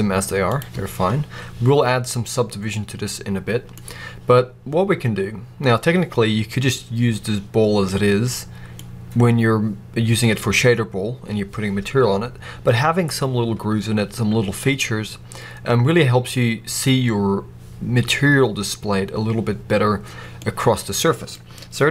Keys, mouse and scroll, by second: 2.4-7.8 middle drag, 8.0 middle click, 8.1 middle click, 8.8-11.3 scroll up 1, 11.3-21.9 middle drag.